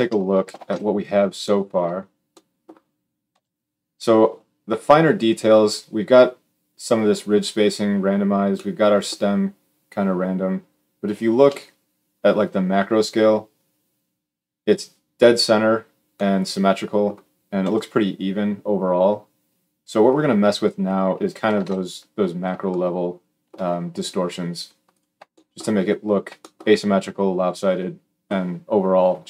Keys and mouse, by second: 0.4 ctrl+alt+space, 0.4 g, 0.6-0.9 middle drag, 3.1 KP_1, 8.3-21.2 middle drag, 11.2 KP_7, 17.4 KP_1, 21.3 ctrl+alt+space, 21.4 alt+middle click, 21.9-24.7 middle drag, 24.7 click, 24.8-26.9 shift+middle drag, 26.9-29.2 drag.